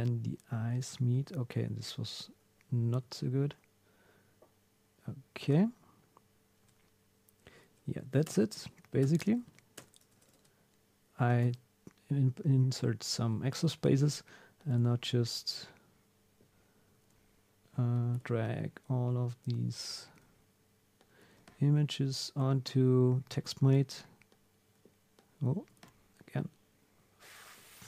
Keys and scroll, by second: 0.8 super+z, 5.4 super+Tab, 7.6 Down, 8.0 Up, 8.3 Return, 8.5 Up, 9.0 Return, 9.3 Up, 9.8 Return, 10.1 Up, 11.4 super+s, 13.8 super+F3, 17.0 super+F3.